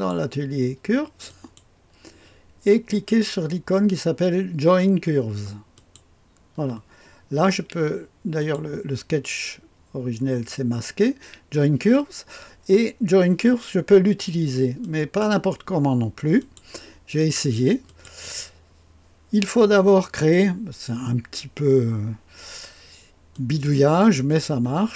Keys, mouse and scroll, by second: 1.3 click, 5.7 click, 8.4 click, 14.8 click, 15.5 click, 16.4 click, 17.8 click, 23.3-24.9 drag.